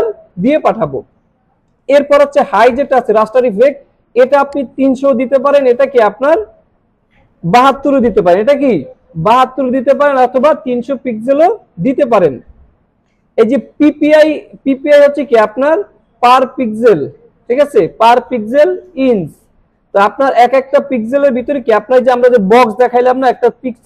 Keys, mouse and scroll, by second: 0.5-1.0 scroll down 1, 2.0 click, 3.5 scroll down 1, 4.4 click, 15.5 click.